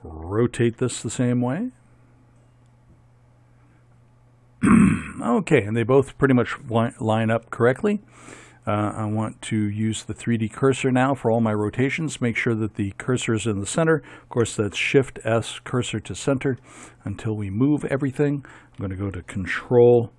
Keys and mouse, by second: 0.7 r, 14.5 shift+s, 16.7 middle click.